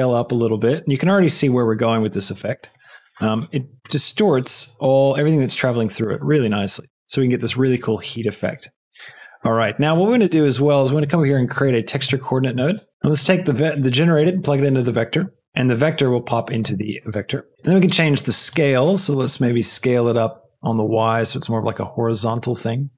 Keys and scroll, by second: 12.0 shift+t, 12.6 e, 12.7 x, 12.9 p.